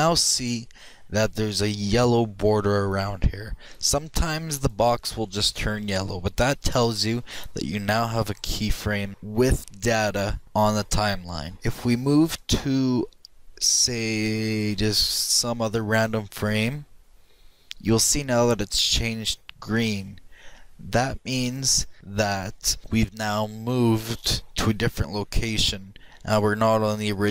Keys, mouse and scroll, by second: 13.1-14.9 drag.